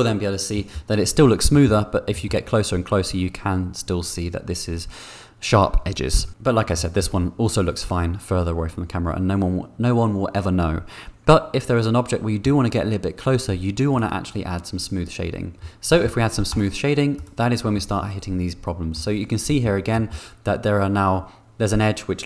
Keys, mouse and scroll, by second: 15.6 middle click, 16.6 right click, 17.7-18.9 middle drag, 19.4 middle click, 19.9 middle click.